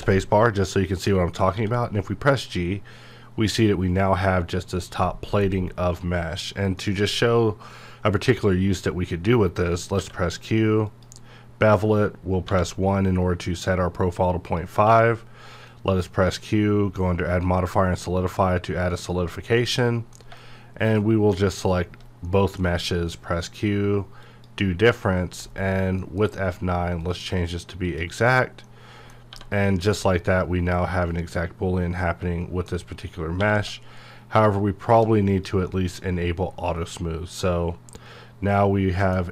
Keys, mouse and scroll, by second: 0.7 middle click, 1.5 g, 4.6 right click, 5.0 middle click, 5.5-6.5 scroll up 1, 6.8 middle click, 10.0 q, 10.9 click, 12.5 1, 13.2-14.5 scroll up 1, 14.5 click, 14.8 q, 17.4 click, 19.3 scroll down 1, 19.6-21.7 middle drag, 21.7 shift+click, 22.2 middle click, 23.0 q, 24.2 click, 25.1-25.9 scroll up 1, 25.9 F9, 27.0 click, 28.6 middle click, 29.3 1, 29.7 click, 30.0-33.4 middle drag, 33.4 q, 34.8 shift+click, 35.7-39.3 middle drag.